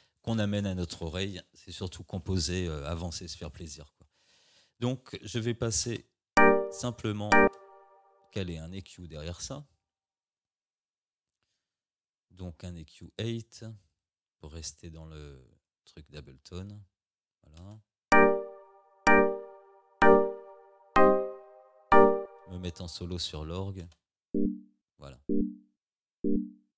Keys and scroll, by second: 5.9 space, 7.5 space, 17.6 space, 22.2 space, 23.8 space.